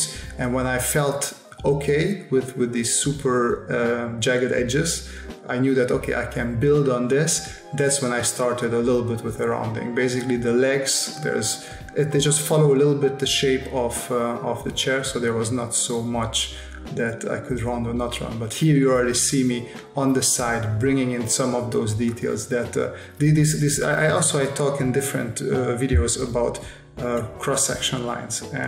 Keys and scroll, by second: 4.9 space, 6.7 space, 8.0 space, 9.1 space, 15.3 space, 16.8 space, 19.8 space, 22.3 space, 25.1 s, 27.1 space.